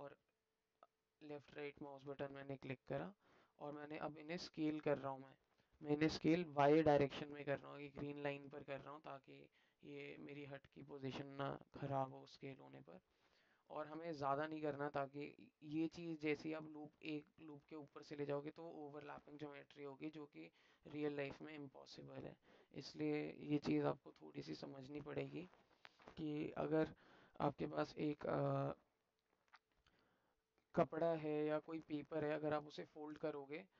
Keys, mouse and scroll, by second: 1.3-3.2 alt+middle drag, 22.9-24.3 alt+middle drag.